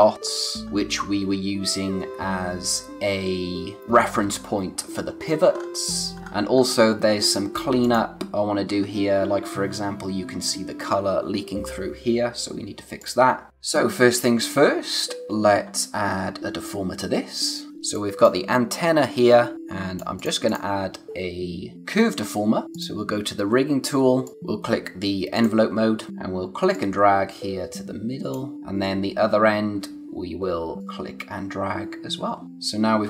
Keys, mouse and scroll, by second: 0.6-2.8 scroll up 1, 4.7 scroll down 1, 6.2-6.8 scroll up 1, 7.8 click, 8.8-10.7 scroll up 1, 13.3 click, 13.5 scroll, 14.1 click, 15.0-15.8 scroll up 1, 17.7 space, 17.9 click, 18.1 space, 18.7 click, 22.7 click, 25.3 click, 26.1 z, 26.7 click, 30.8 click.